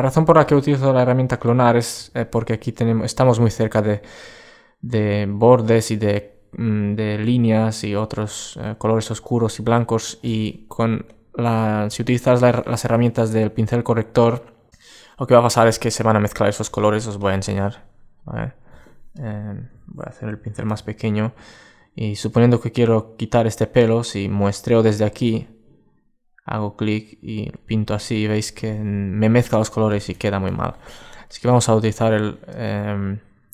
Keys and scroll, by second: 1.7 super+space, 29.7 alt+super+z, 32.5 super+space.